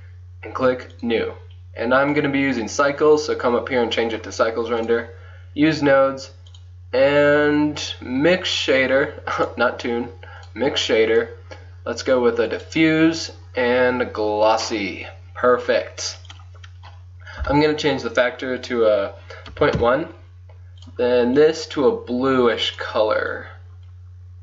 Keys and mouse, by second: 3.8 click, 4.1 middle click, 4.9-8.2 drag, 8.4-9.4 middle drag, 12.9 click, 15.1 click, 15.2 middle click, 15.2-16.3 drag, 18.1 click, 18.3-20.9 middle drag, 20.9-22.7 drag, 22.8 middle click.